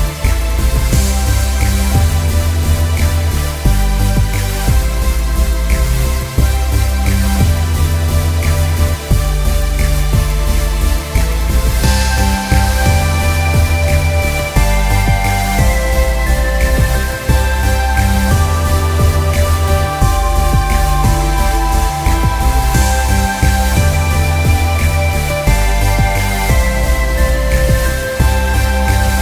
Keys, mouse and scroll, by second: 2.9 Return, 3.8 z, 4.1 click, 4.8 space, 5.2 click, 5.3 space, 9.5 click, 12.0 ctrl+e, 15.3 click, 17.4 ctrl+alt+click, 18.6 ctrl+alt+q, 19.8 click.